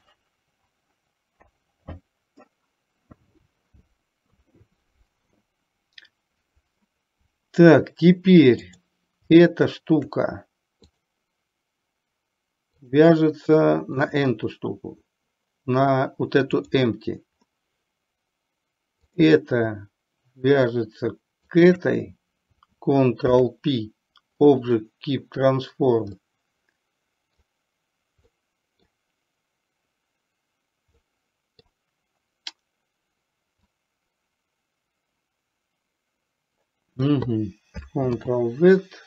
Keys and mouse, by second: 8.7 click, 10.9 click, 12.9 click, 16.7 click, 21.6 shift+click, 23.3 ctrl+p, 26.2-27.4 middle drag, 28.4 middle click, 31.1-31.7 middle drag, 33.8-37.2 drag, 38.2 ctrl+z.